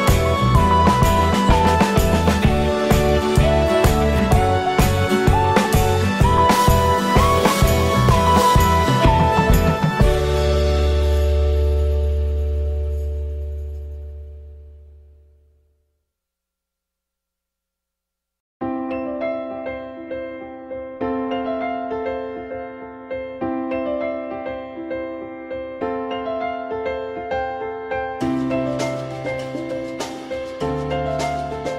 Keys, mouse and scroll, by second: 9.3 alt+middle click, 24.5 click, 26.8 click, 28.1 click.